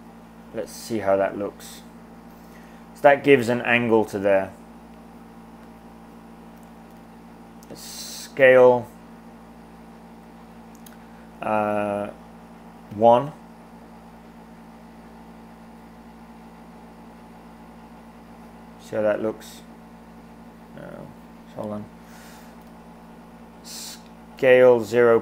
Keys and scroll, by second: 6.9 super+z, 8.5 s, 13.0 1, 22.7 super+z, 24.2-25.2 typing.